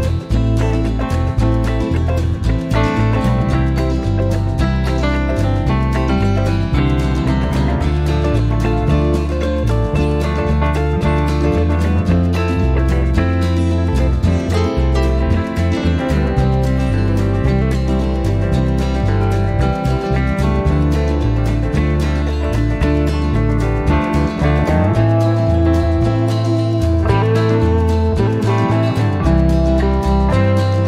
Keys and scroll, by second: 1.9-5.5 typing.